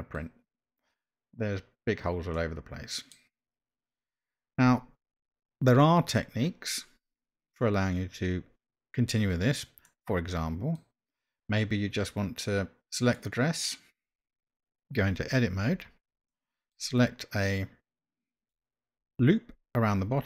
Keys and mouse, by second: 2.3-3.1 middle drag, 9.8-10.8 middle drag, 13.0 click, 15.7 Tab, 16.3 middle click.